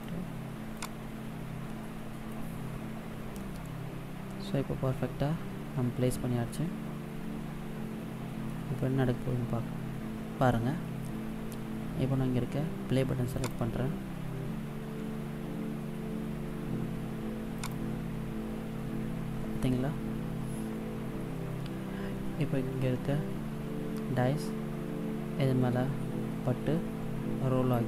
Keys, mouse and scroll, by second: 0.6 click, 3.3 middle click, 13.2 click, 17.5 click.